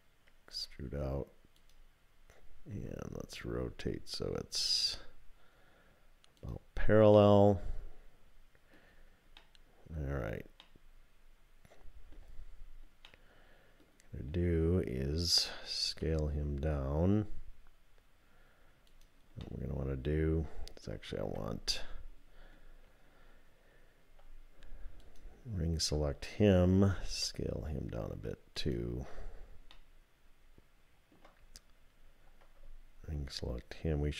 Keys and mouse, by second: 0.5 e, 2.7 r, 5.7 typing, 7.1 click, 7.2-8.7 middle drag, 9.4 middle click, 10.6-12.2 middle drag, 13.1 middle click, 15.9 s, 19.4-20.8 drag, 19.6 middle click, 21.2 2, 25.0 alt+click, 27.1 s, 29.9-31.2 drag.